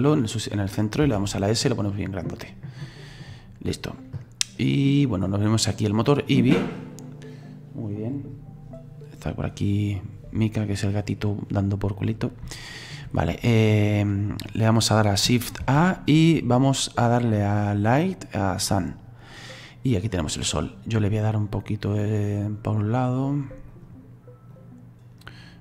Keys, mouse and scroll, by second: 1.1 s, 4.3-4.7 scroll down 3, 4.7-6.1 middle drag, 6.1 click, 12.7 shift+middle click, 13.2-13.7 scroll up 5, 13.7-18.9 scroll down 2, 19.5-20.1 scroll down 3, 20.1-21.4 middle drag, 21.4-25.6 drag.